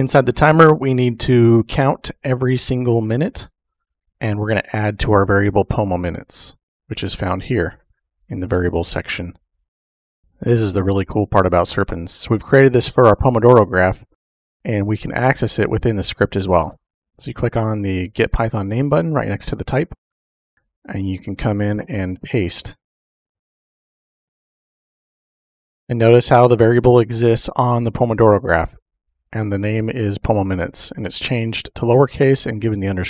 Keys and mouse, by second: 20.5 click, 21.9 ctrl+v, 21.9 typing, 23.9-25.8 typing, 26.0 click, 29.7 click.